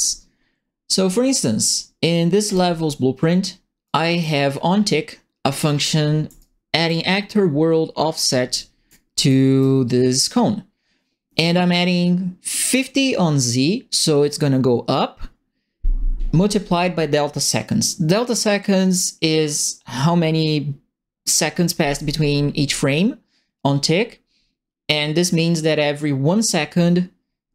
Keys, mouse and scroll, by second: 2.4 click, 3.8 right click, 4.7 middle click, 5.9 ctrl+middle click, 6.3 right click, 8.6 ctrl+middle click, 9.2 right click.